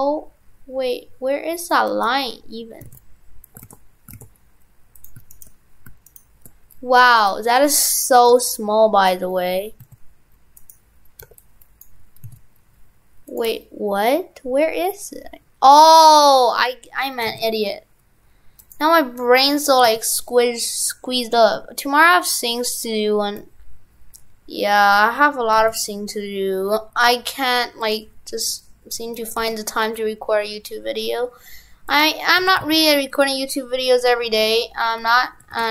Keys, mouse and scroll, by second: 2.0 right click, 2.9 shift+f, 3.7 shift+f, 4.3 shift+f, 5.3 shift+right click, 5.5 shift+right click, 7.6 right click, 10.6 right click, 10.7 right click, 32.4 shift+f, 35.0 Tab, 35.5 shift+f.